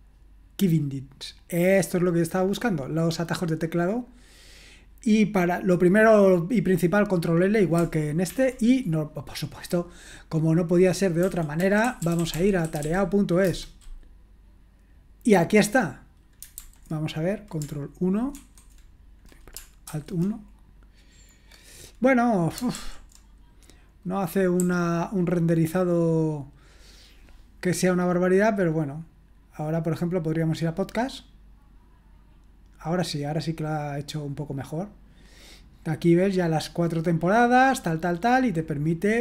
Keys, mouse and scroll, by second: 1.5-2.1 scroll down 1, 2.1-6.1 scroll down 1, 6.1-7.3 scroll down 1, 7.4 click, 8.3 ctrl+l, 11.0-13.5 typing, 16.5 super+h, 18.4 ctrl+1, 19.9 alt+1, 22.8 super+l, 24.6 j, 30.5 click, 36.9-37.8 scroll down 1, 37.8-39.2 scroll down 1.